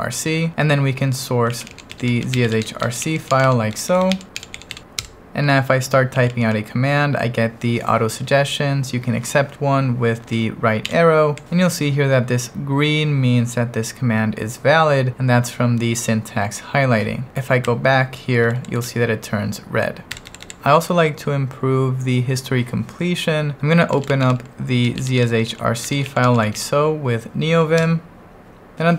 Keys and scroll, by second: 1.2-6.8 typing, 10.8 Right, 17.6 BackSpace, 18.8 BackSpace, 20.1 BackSpace, 23.7-27.1 typing, 27.9 Return, 28.7-28.9 typing.